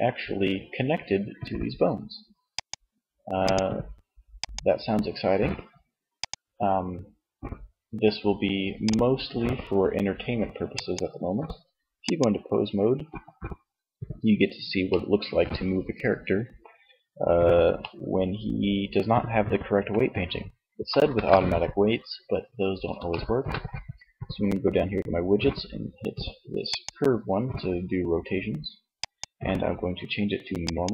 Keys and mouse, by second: 1.7-4.2 drag, 11.3 click, 14.0 middle click, 20.1 KP_1, 25.7-27.5 drag, 27.9-30.0 drag.